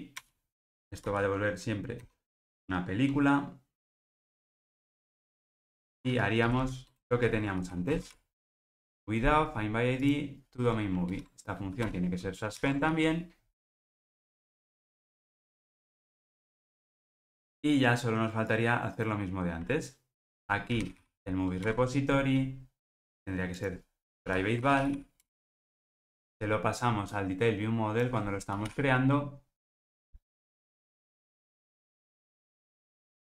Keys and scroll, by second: 0.2 Return, 8.1 super+v, 11.1 alt+Return, 12.8 ctrl+alt+o, 21.7 Return, 30.0 Return, 32.0 super+b, 32.5 super+z.